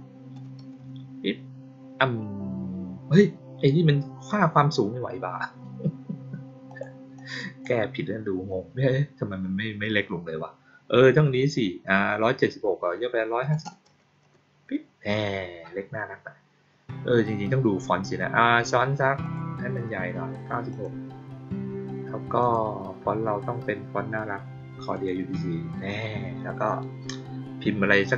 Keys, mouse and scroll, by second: 6.6 click, 7.1 click, 19.1 click, 20.6 click, 22.3 click, 24.9 click.